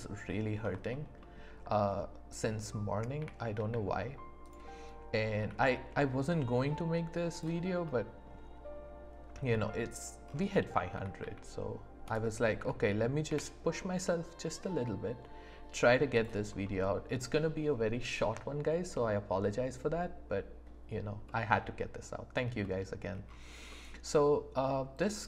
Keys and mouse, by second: 3.2 g, 3.5 z, 5.3 s, 5.6 z, 7.3 click, 7.8 middle click, 9.5 middle click, 10.9 s, 11.1 z, 12.5 s, 13.2 x, 16.1 click, 16.6 middle click, 21.3 middle click, 22.6 middle click, 23.7 middle click.